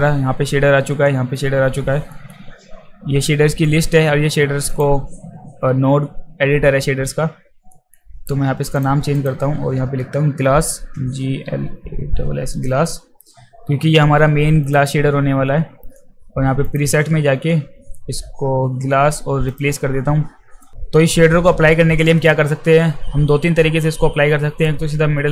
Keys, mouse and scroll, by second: 2.1 alt+middle click, 4.7 click, 7.7 alt+middle click, 8.7 click, 9.2 click, 11.0-12.7 typing, 14.7 click, 16.6 click, 19.5 click, 20.6 click, 25.2-25.3 middle drag.